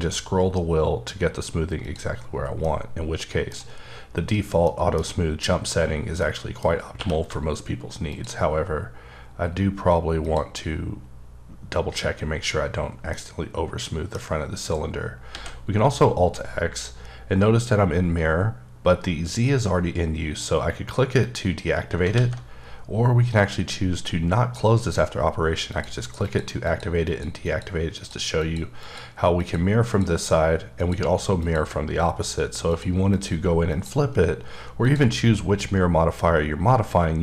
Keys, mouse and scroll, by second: 0.3-1.8 scroll up 7, 2.0 click, 2.2 scroll down 3, 2.6-4.6 middle drag, 4.6 middle click, 5.0 scroll down 1, 6.2 middle click, 6.7 scroll up 2, 6.9 q, 8.1 shift+click, 8.7-9.0 scroll up 2, 9.7 scroll down 1, 10.2 click, 10.7 scroll down 2, 13.1 middle click, 15.3 x, 21.2 click, 22.1 alt+x, 24.8 click, 25.7 click, 26.2 click, 26.6 click, 27.1 click, 27.4 click, 27.9 click, 28.4 click, 28.8 click, 29.4 click, 30.8 click, 31.4 click, 32.7 click, 33.1 click, 33.7 click, 34.8 click.